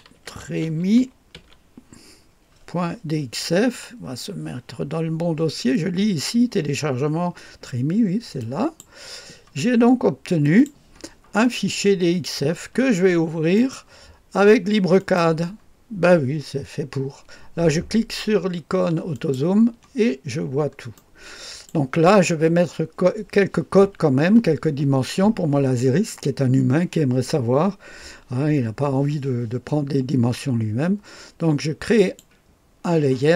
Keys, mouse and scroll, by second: 0.0-1.8 typing, 8.4 click, 10.4 click, 13.6 right click, 15.0 click, 19.1 click, 20.3-21.0 scroll down 2, 21.0 right click, 32.0 click, 32.6-33.3 drag.